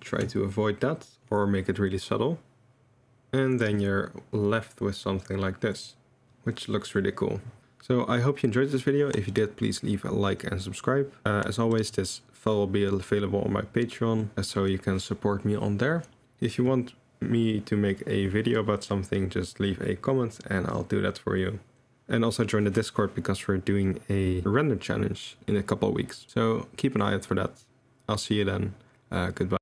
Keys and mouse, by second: 5.5 middle click, 7.3-8.3 middle drag, 19.9 click, 21.9 click.